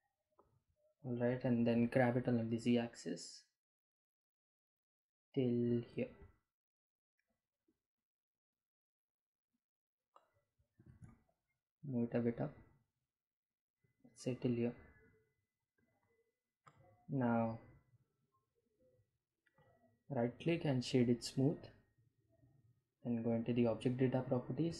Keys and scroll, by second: 0.7 g, 1.8 z, 6.2 Delete, 9.2 g, 10.4 z.